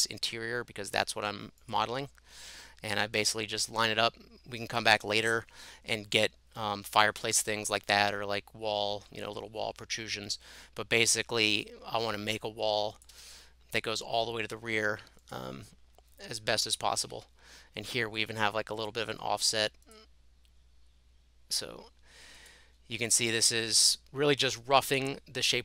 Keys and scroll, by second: 13.1 Escape, 16.4 space.